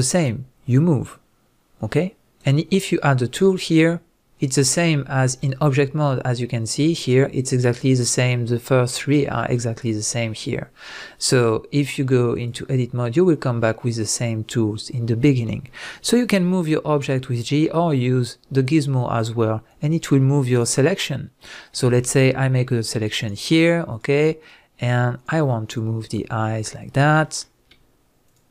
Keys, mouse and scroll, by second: 2.4 right click, 3.4 click, 5.3-17.4 drag, 16.4 g, 17.4 right click, 18.0 click, 18.7 right click, 19.7-20.5 drag, 20.5 right click, 22.0-22.3 scroll up 1, 22.3-22.8 scroll down 1, 22.8 click, 23.2 shift+click, 23.6 shift+click, 23.9 shift+click, 24.4 shift+click, 24.8 shift+click, 25.1 shift+click, 25.7 shift+click, 26.7-27.2 scroll up 1, 28.3 shift+click.